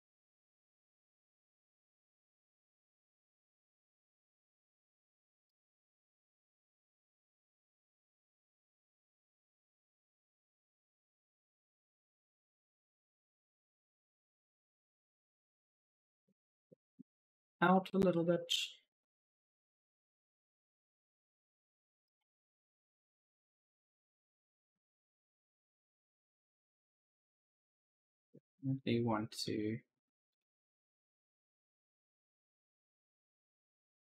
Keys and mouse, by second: 0.4 click, 2.7 click, 4.1-5.2 typing, 4.6 right click, 5.8 click, 7.7 right click, 7.7 d, 8.5 right click, 8.9 w, 9.3 click, 14.6 right click, 14.7 a, 14.9 s, 15.5 q, 15.8 d, 16.8 click, 17.3-18.1 typing, 17.4 right click, 18.3 click, 21.6-28.1 typing, 21.9 right click, 26.2 right click, 30.1 click, 32.9 click.